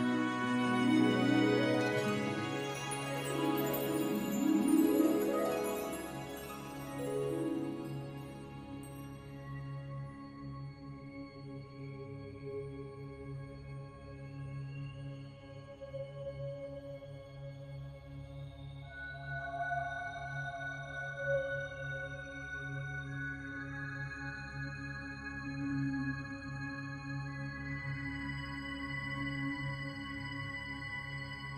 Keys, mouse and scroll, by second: 0.6 click, 5.8 click, 9.5 click, 17.0 click, 28.6 click.